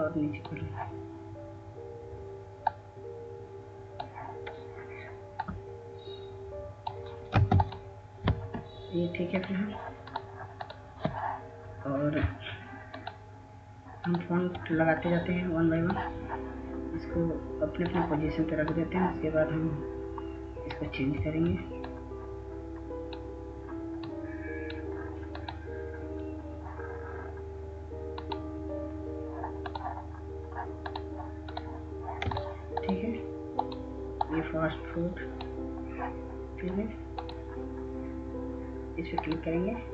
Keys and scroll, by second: 8.3 Up, 8.3 ctrl+space, 12.7 ctrl+space.